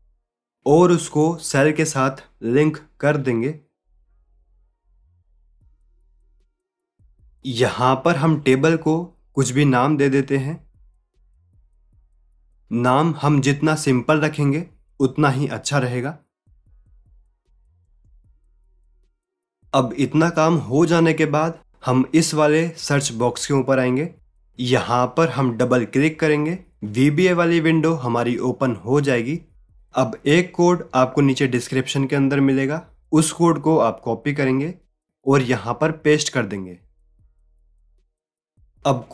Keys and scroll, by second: 31.8 ctrl+a, 33.7 ctrl+c, 36.7 ctrl+a, 37.7 ctrl+v.